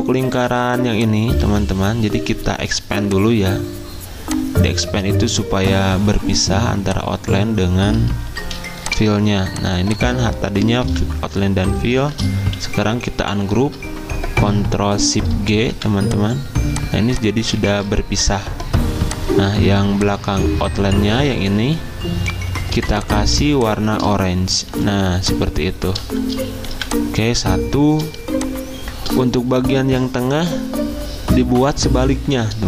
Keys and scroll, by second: 8.4 z, 9.7 v, 17.7 ctrl+shift+z, 18.7 Escape, 22.7 z, 24.7 typing, 26.7 v, 28.2 ctrl+z.